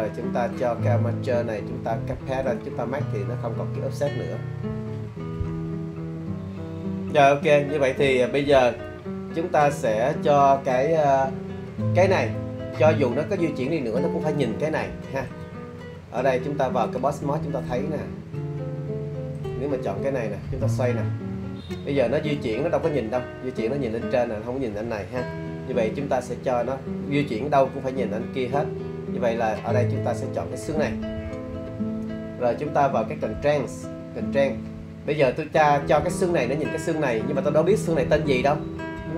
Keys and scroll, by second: 25.7 super+z.